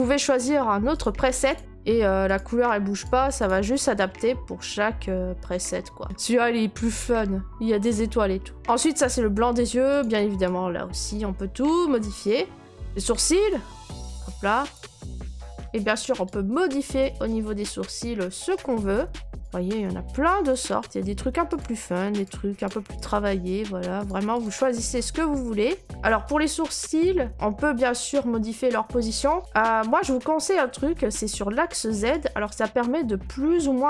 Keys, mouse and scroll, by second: 1.0 click, 1.5 click, 1.6 middle click, 1.6 click, 1.7 middle click, 1.7 middle click, 1.8 middle click, 2.4 click, 3.0 click, 3.5 click, 4.9 middle click, 5.0-6.0 middle click, 6.0 middle click, 6.0 right click, 8.6 click, 9.6 click, 12.0 click, 12.6 click, 12.6 right click, 13.5 click, 14.2 click, 14.7 click, 17.9 click, 19.4 click, 19.6 scroll, 20.6 click, 20.8 scroll, 21.6 click, 22.2 click, 22.7 click, 23.1 click, 23.4 middle click, 23.4 middle click, 23.5 middle click, 24.1 click, 24.4 click, 25.8 click, 26.1 right click, 28.7 click.